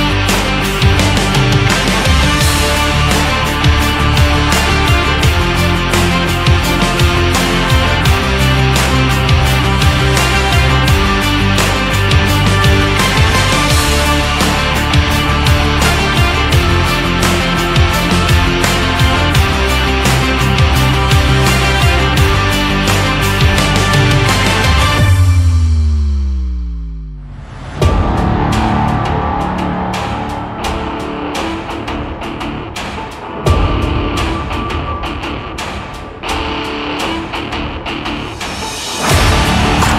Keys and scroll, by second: 9.2 Left, 10.1 Right, 22.6 Up, 28.0 Down, 30.6 Right.